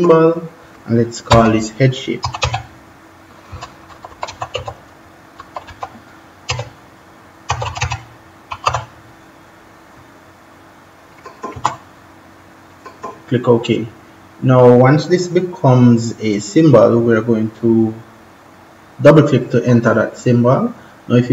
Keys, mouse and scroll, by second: 1.2-9.0 typing, 11.0 click, 11.4 space, 12.6 click, 19.4 click.